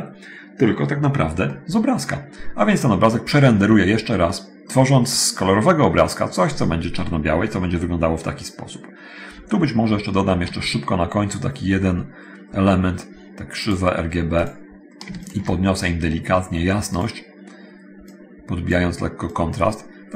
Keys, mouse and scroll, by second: 1.6-2.8 middle drag, 2.8-3.1 scroll down 1, 4.0-4.4 scroll down 1, 4.4 middle click, 4.7-5.4 scroll down 1, 5.6 scroll down 1, 7.7 middle click, 9.2-10.5 scroll up 1, 14.6 click, 16.7 click, 18.3 click, 19.5-20.1 drag.